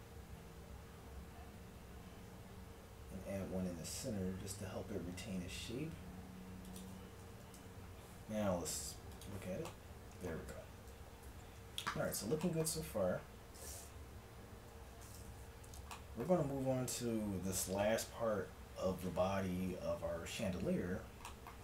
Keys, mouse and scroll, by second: 7.3 Tab, 7.5 a, 9.2-11.1 drag, 10.9 KP_1, 11.6 Tab, 14.1-15.9 middle drag, 14.7 a, 17.8-21.6 middle drag.